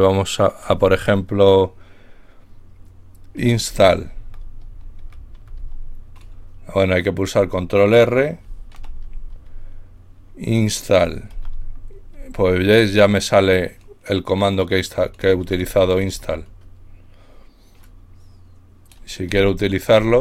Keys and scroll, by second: 3.2-6.4 typing, 8.8 ctrl+r, 11.0-12.1 typing, 19.3-20.2 typing.